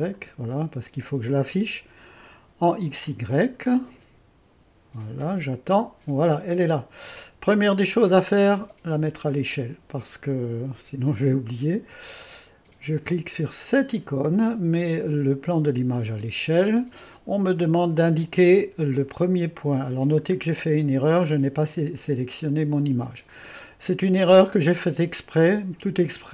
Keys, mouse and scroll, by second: 6.7-7.2 scroll up 2, 11.5-12.5 drag, 15.9 click, 19.3-20.0 scroll up 2, 23.4-24.0 scroll up 2, 24.3-26.3 drag.